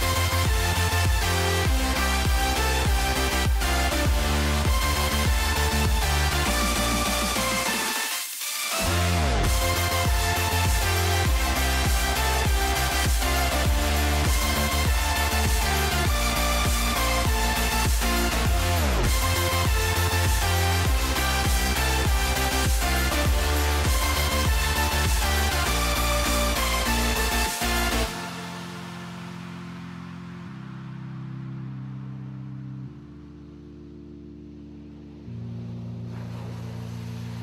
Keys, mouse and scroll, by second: 0.5 s, 2.9 click, 3.4 s, 5.0 middle click, 5.5 middle click, 6.1 shift+middle click, 6.6 shift+middle click, 7.1 s, 8.3 middle click, 8.9 middle click, 9.6 middle click, 10.0 middle click, 10.5 shift+click, 11.3 shift+r, 12.0 Return, 12.6 shift+middle click, 13.2 l, 14.7 g, 15.8 click, 16.2 shift+middle click, 17.4 r, 21.4 r, 23.4 r, 28.6 g, 30.4 middle click, 31.2 middle click, 32.0 s, 35.3 g, 36.4 shift+middle click.